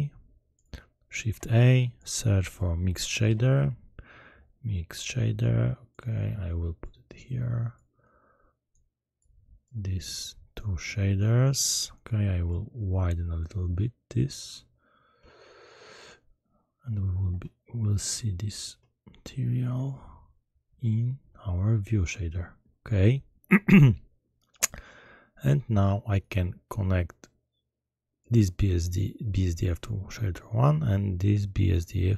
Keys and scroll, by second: 1.2 shift+a, 3.1 m, 3.2 i, 3.5 x.